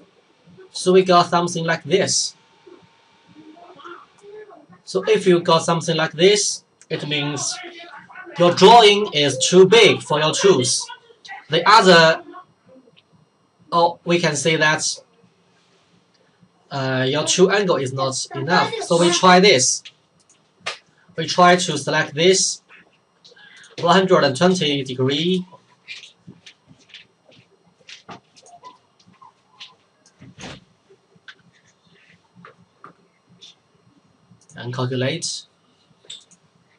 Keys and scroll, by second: 31.3 typing.